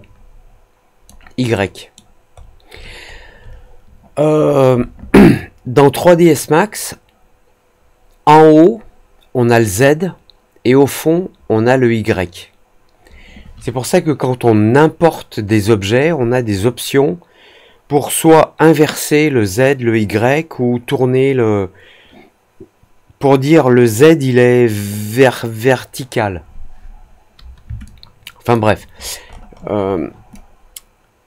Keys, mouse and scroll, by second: 1.5 alt+middle click, 2.3-2.9 alt+scroll down 2, 3.1 alt+scroll up 1, 27.8 alt+click, 28.9-30.0 alt+scroll up 3, 30.2 alt+click.